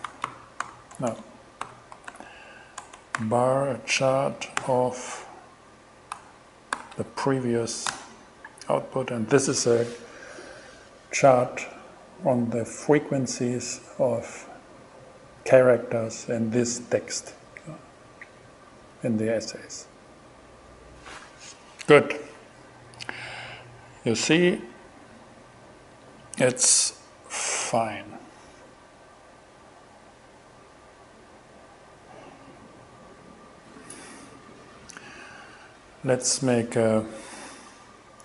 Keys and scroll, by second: 0.0-3.2 typing, 4.0 Return, 4.6 alt+g, 6.8 shift+5, 7.9 shift+Return, 24.7 BackSpace.